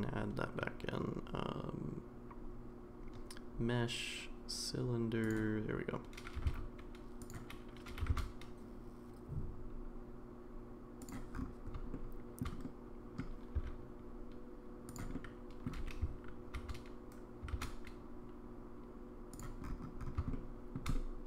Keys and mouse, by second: 6.3 g, 7.9 g, 11.9-12.4 shift+middle drag, 12.6-13.2 middle drag, 13.5 s, 15.1-15.6 middle drag, 15.8 g, 20.3 shift+middle click, 20.9 middle click.